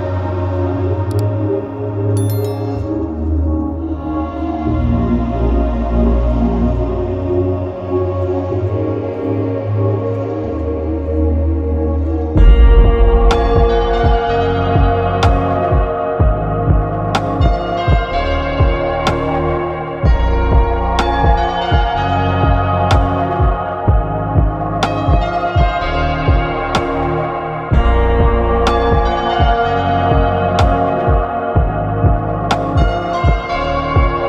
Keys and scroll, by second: 7.5 ctrl+alt+shift+e, 12.1 ctrl+alt+shift+e.